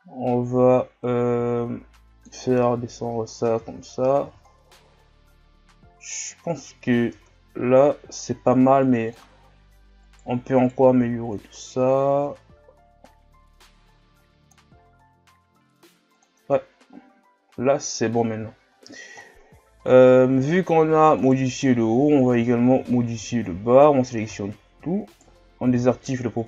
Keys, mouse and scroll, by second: 2.4-2.9 scroll down 2, 3.3 scroll up 1, 3.5 Tab, 3.9-4.2 scroll down 1, 4.2 a, 4.5 scroll down 4, 5.4 scroll up 4, 6.4-7.2 scroll up 1, 7.2 Tab, 9.1 click, 10.0 alt+right click, 10.6 alt+right click, 11.4-14.9 drag, 14.9 s, 16.4 Tab, 16.8 scroll down 1, 17.4 scroll down 3, 17.9-18.4 scroll up 5, 18.5 shift+scroll down 5, 18.8-19.2 scroll up 1, 19.2 shift+scroll down 4, 19.8-21.2 scroll up 1, 21.2 right click, 22.4 Tab, 22.8 a, 23.2 a, 24.3 s, 25.7 o.